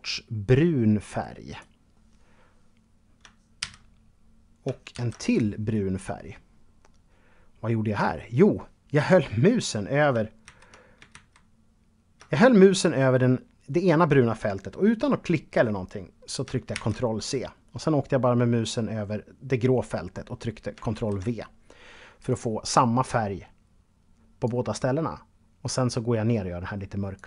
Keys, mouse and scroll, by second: 2.8 ctrl+c, 4.1 ctrl+v, 4.5 click, 9.6 ctrl+z, 11.4 z, 15.9 ctrl+c, 20.1 ctrl+v, 21.4 click, 23.9 click.